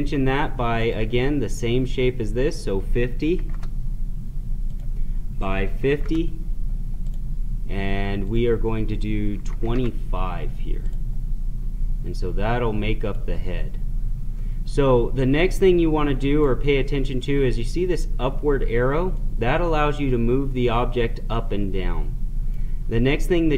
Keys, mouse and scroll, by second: 0.8 click, 4.7 click, 7.0 click, 10.9 click, 15.4-18.7 right drag, 19.1-23.5 drag.